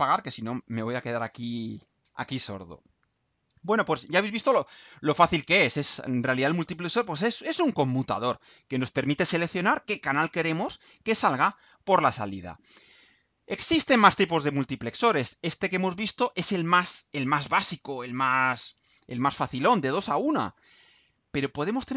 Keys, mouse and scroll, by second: 12.8 click, 18.5 click, 19.2-20.2 scroll down 6, 20.8-21.7 scroll down 4.